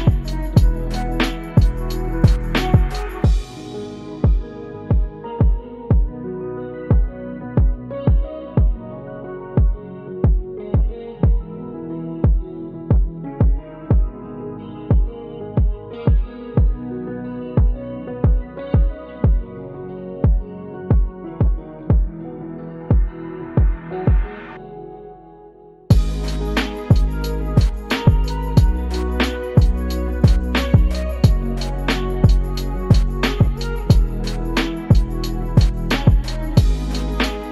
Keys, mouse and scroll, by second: 4.8 click, 6.0-8.2 drag, 9.1 click, 10.5-11.4 drag, 13.4-14.8 drag, 17.6-18.7 drag, 29.4 Tab, 30.4 Tab, 30.9 1, 31.6 click, 32.4 Tab, 34.2 click, 35.3 g.